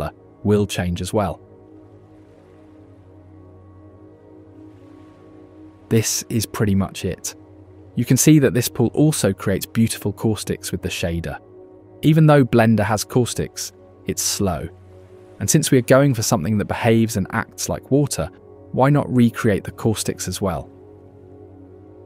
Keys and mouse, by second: 0.8 g, 5.9 ctrl+s, 10.0 shift+click, 13.3 shift+click, 13.6 shift+middle click, 13.8 shift+drag, 15.2-15.6 shift+middle drag, 18.7 click, 19.9 click, 20.9 click.